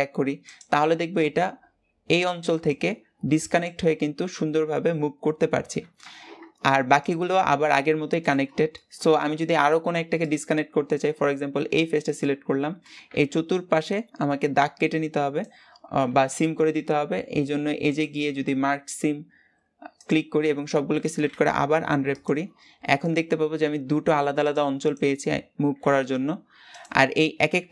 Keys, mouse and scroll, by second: 6.9 click, 7.5 g, 8.6-10.2 middle drag, 10.2 click, 11.7 scroll down 1, 12.0-19.9 middle drag, 19.9 click, 20.6 a, 22.1 u, 23.0 click, 23.5 g, 24.8 click, 25.9 l.